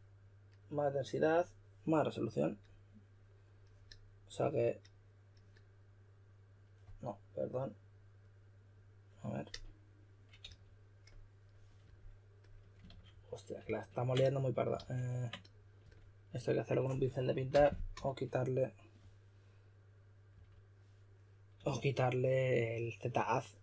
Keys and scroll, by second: 10.4 typing, 12.9 super+z, 13.1 super+z, 13.6 super+z, 14.7 super+z, 17.5-17.9 typing, 20.3 typing, 21.6 typing.